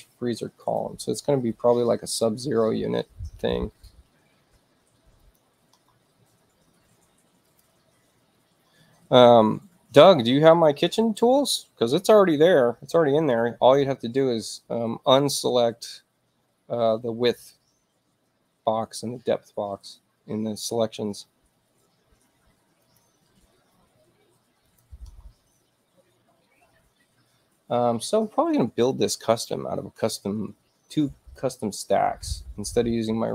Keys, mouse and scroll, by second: 0.6 click, 5.2 click, 7.5 click, 19.9 space, 22.8 click, 24.6 click, 31.3 click.